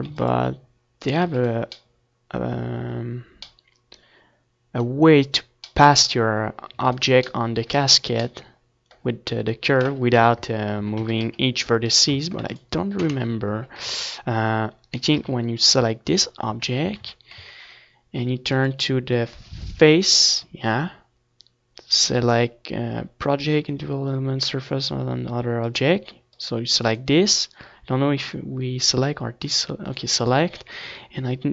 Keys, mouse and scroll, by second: 2.3 ctrl+s, 3.3 ctrl+s, 5.7 KP_1, 5.9 Tab, 6.3 z, 6.5 a, 6.8 c, 7.6-9.3 right drag, 7.7 Tab, 8.0 ctrl+s, 9.0 Tab, 9.5 a, 10.8 KP_3, 12.2 z, 12.7 a, 13.1 a, 14.2-16.2 drag, 21.4-24.5 drag, 24.8-28.1 drag.